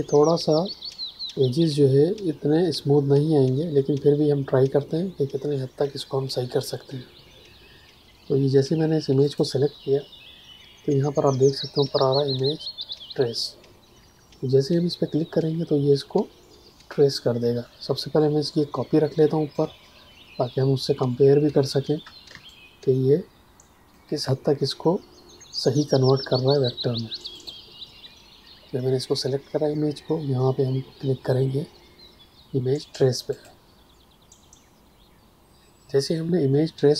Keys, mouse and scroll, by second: 9.2 click, 19.5 click, 22.2 space, 22.4 click, 27.3 click, 33.3 click.